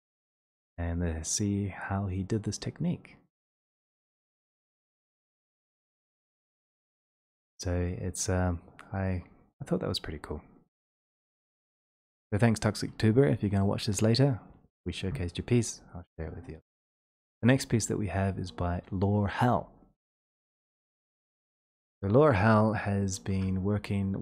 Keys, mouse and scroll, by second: 0.9-2.4 scroll, 2.6-3.2 scroll, 3.2-3.9 scroll, 3.9-4.3 scroll, 5.0 click, 9.3 click, 11.9 click, 17.8 ctrl+click, 21.7 click.